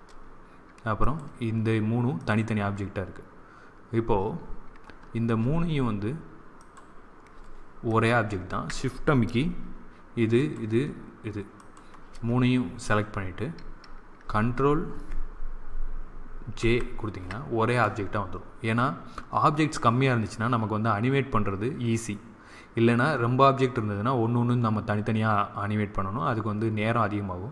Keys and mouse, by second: 0.9-3.8 right drag, 6.5-9.6 right drag, 10.3-13.1 right drag, 16.5 ctrl+j.